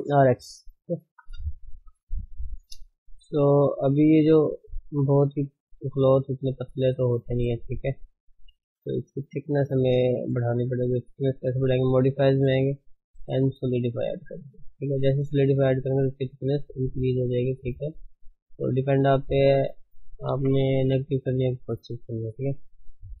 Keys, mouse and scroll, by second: 0.3 Tab, 1.5 shift+middle click, 1.8 scroll, 1.9 scroll down 2, 2.2-3.2 shift+middle drag, 2.4 scroll, 3.2-4.4 scroll up 8, 3.5 shift+middle click, 3.7-7.2 middle drag, 7.2 scroll up 2, 7.5-9.4 middle drag, 9.4 ctrl+space, 9.8-10.2 scroll up 2, 10.2-14.0 shift+middle drag, 14.0-14.5 drag, 14.5 scroll down 4, 15.0-15.8 middle drag, 15.8-16.2 scroll up 2, 16.2-17.7 middle drag, 17.7 scroll down 4, 17.9 middle click, 18.2 middle click, 18.4 scroll down 3, 18.8-20.3 middle drag, 20.3 KP_1, 20.6-21.5 scroll up 4, 21.5 shift+middle click, 22.0-22.3 scroll up 1, 22.3-22.7 scroll down 3, 23.0-23.2 middle drag.